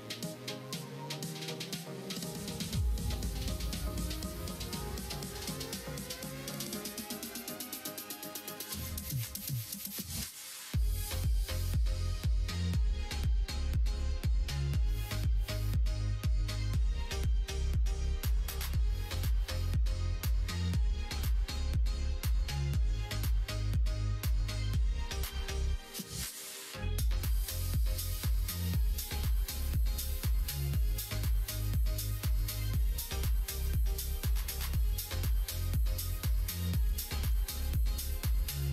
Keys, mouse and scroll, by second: 0.4 f, 1.1 ctrl+z, 1.6 click, 2.0 shift+click, 2.9 shift+click, 3.3 shift+click, 4.0 ctrl+e, 4.7 middle click, 6.6-9.3 middle drag, 10.3 k, 16.5-17.6 middle drag, 18.2 middle click, 19.7 k, 22.9 middle click, 23.1 4, 23.6 click, 24.6 shift+click, 25.4 f, 27.1 middle click, 28.6 click, 29.1 middle click, 29.8 middle click, 30.7 click, 31.4 shift+click, 32.2 g, 33.6 g, 35.0 f, 35.8 click, 36.2 shift+click, 37.3 f, 37.4 middle click.